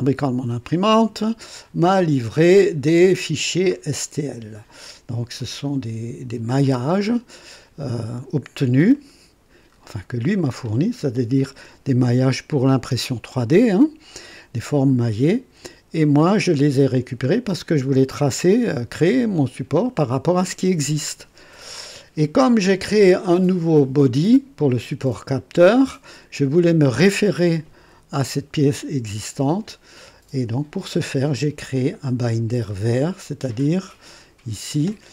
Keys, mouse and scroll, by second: 3.7-4.0 scroll up 2, 5.3 click, 6.6 space, 8.9-9.6 right drag, 9.7-10.0 scroll up 2, 10.4-11.0 right drag, 11.6 &, 15.3 &, 16.8-17.2 scroll down 1, 22.7-23.1 scroll down 1.